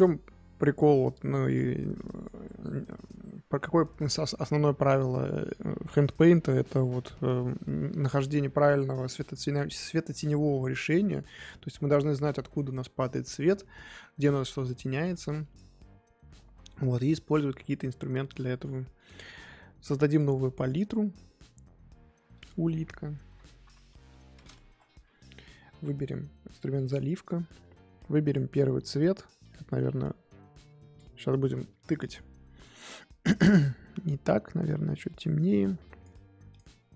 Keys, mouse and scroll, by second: 2.7 scroll down 2, 2.8 middle click, 3.2-3.5 scroll up 1, 3.5-14.7 middle drag, 14.7-15.1 scroll up 2, 15.1-25.4 middle drag, 26.9-29.5 drag, 32.1-34.2 drag, 36.6-36.9 drag.